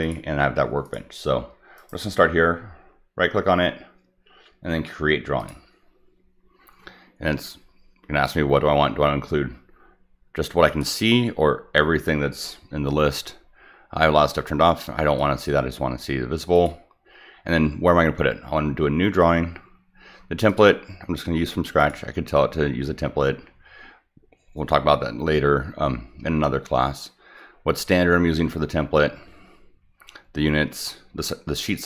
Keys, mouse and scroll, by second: 0.0 click, 0.8 click, 1.8 right click, 5.4 click, 10.7 click, 15.2 click, 16.5 click, 20.5 click, 21.8 click, 31.7 click.